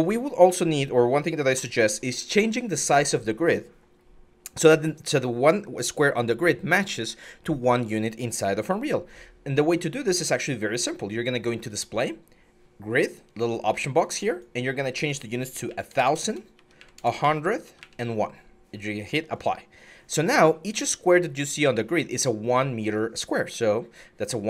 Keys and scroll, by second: 15.4-16.5 typing, 16.3 Tab, 17.4 Tab.